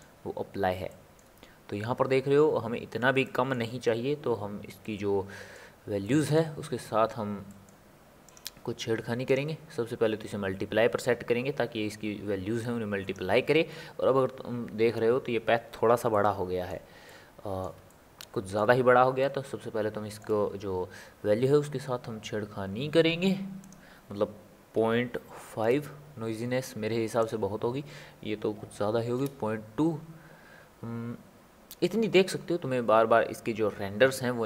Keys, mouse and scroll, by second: 0.2-0.9 scroll up 2, 0.9-8.3 shift+middle drag, 8.3-11.3 drag, 12.6-14.0 drag, 14.0 scroll down 1, 14.2 scroll up 1, 14.4-14.9 scroll down 3, 14.9-16.1 scroll up 1, 16.1-22.3 middle drag, 23.6-26.8 drag, 27.2-30.4 drag.